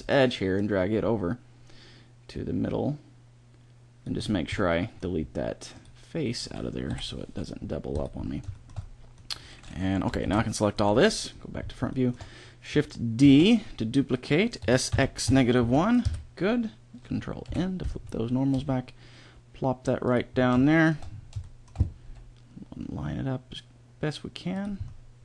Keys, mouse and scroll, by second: 0.4 click, 5.6 middle click, 6.8 Delete, 10.1 ctrl+l, 10.8 KP_1, 13.0 shift+d, 14.4 s, 17.3 ctrl+n, 18.4 g, 21.0-24.0 middle drag, 21.9 g.